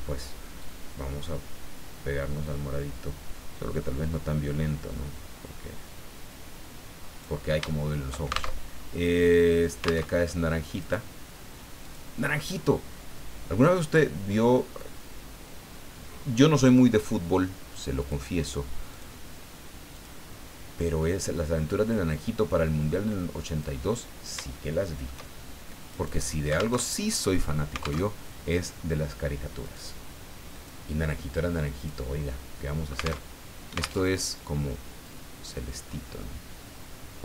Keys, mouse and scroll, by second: 0.6-7.4 drag, 7.7 shift+middle click, 8.5 alt+shift+Tab, 10.1 alt+Tab, 10.8 right click, 11.8 click, 18.0 click, 18.9 click, 19.9 click, 21.3-23.8 drag, 24.5 shift+middle click, 25.9 right click, 26.7 alt+Tab, 28.0 alt+Tab, 29.6 click, 30.5 click, 31.8 click, 33.2 alt+Tab, 34.0 alt+Tab, 35.0-37.2 drag.